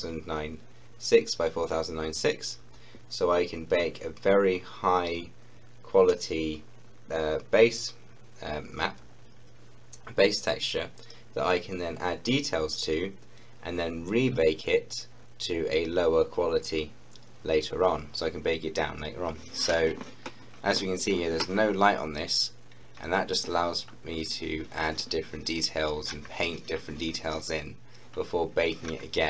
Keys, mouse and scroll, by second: 22.3 scroll up 1, 23.7 scroll down 1, 28.1-28.5 scroll down 1.